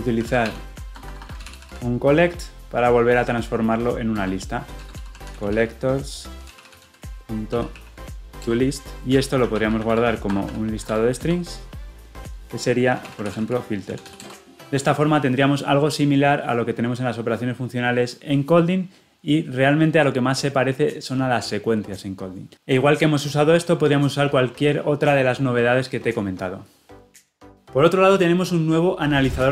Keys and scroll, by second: 4.1 Return, 8.4 Return, 11.3 Return.